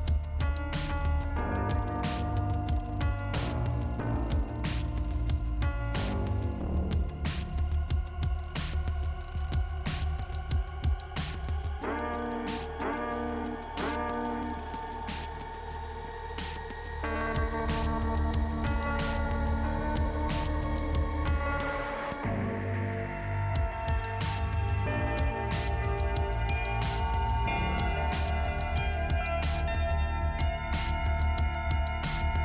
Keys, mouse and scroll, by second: 0.4 click, 1.6 click, 5.5-6.0 scroll down 1, 6.1 p, 6.5 scroll down 2, 10.3 scroll up 2, 13.0 click, 13.7 right click, 14.7 click, 17.7 click, 18.6 click, 21.6 click, 22.1 click, 24.3 click, 30.1 click, 31.7 click, 31.8 right click.